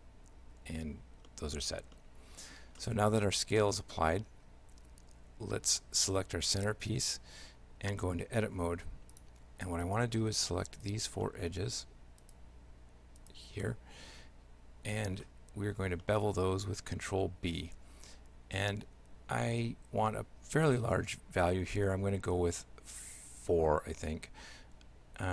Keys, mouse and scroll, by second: 1.3 middle click, 2.0 shift+middle click, 2.8 middle click, 3.8 middle click, 4.5 Tab, 5.4 Tab, 6.0 right click, 7.6 Tab, 8.5 ctrl+Tab, 9.9 right click, 10.9 shift+right click, 11.3 shift+middle click, 12.2 shift+right click, 13.2 shift+right click, 13.7 shift+middle click, 15.3 middle click, 16.1 shift+middle click, 17.7 ctrl+b.